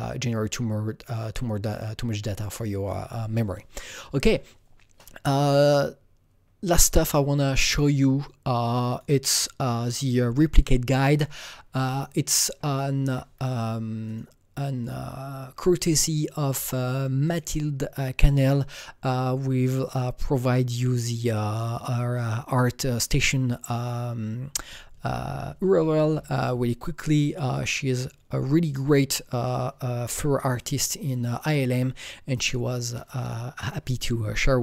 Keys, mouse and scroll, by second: 8.9 click, 11.7 alt+Num_Lock, 11.7 click, 11.8 alt+right click, 12.2 alt+middle click, 12.7-17.2 alt+right drag, 14.0 click, 14.8 click, 17.2 click, 30.5-34.6 drag.